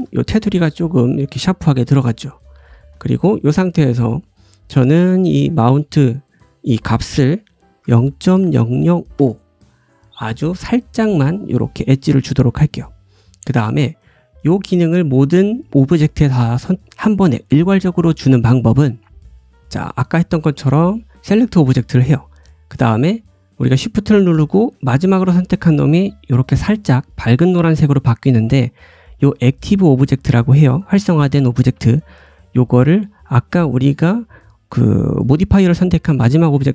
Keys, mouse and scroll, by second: 1.4 g, 2.4-5.0 ctrl+drag, 2.6 ctrl+z, 3.0 shift+middle click, 8.4 KP_0, 13.5-14.4 scroll down 1, 14.4-16.5 scroll down 1, 16.5-35.9 drag, 16.5-19.5 middle drag, 16.5-19.5 right drag, 25.0 shift+middle click, 25.0 shift+right click, 35.9-36.7 shift+right drag.